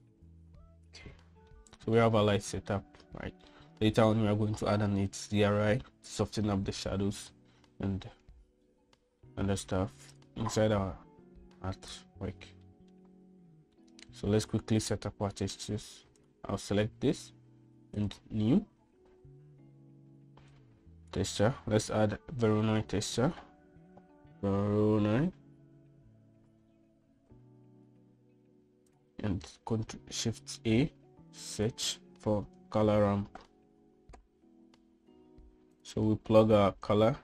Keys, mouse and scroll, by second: 2.3 middle click, 3.5-4.3 middle drag, 10.1 middle drag, 10.9 click, 11.5 g, 13.5 middle click, 14.6 middle click, 17.0 click, 18.8 click, 21.3 click, 22.5 shift+a, 30.3 shift+a, 31.5 shift+a.